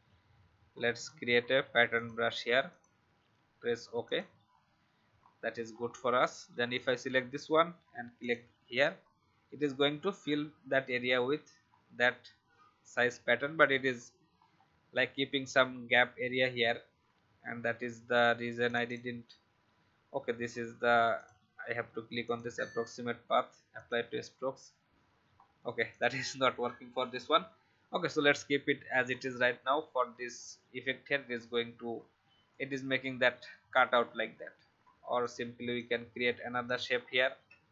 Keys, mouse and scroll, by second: 5.1-5.7 alt+scroll down 1, 5.7-6.7 scroll down 1, 6.7-9.2 drag, 11.6 scroll down 1, 14.3 alt+scroll up 1, 15.7-16.0 alt+scroll down 1, 18.6 click, 25.3-25.8 alt+scroll down 1, 25.8 click, 28.1-28.5 alt+scroll up 1, 29.0 alt+scroll down 1, 32.4-33.6 drag, 33.8 scroll up 1, 35.2 click, 36.9 alt+scroll up 1, 37.5 a.